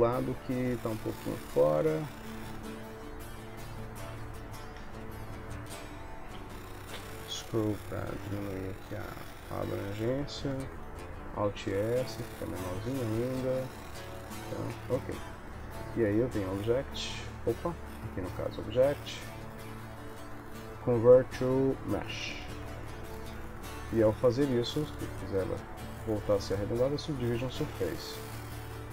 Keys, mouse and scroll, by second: 0.5 g, 6.4 g, 11.4 alt+s, 12.9 middle click, 13.5 middle click, 14.8 Tab, 16.4 click, 24.7 click, 25.4 click, 27.8 middle click.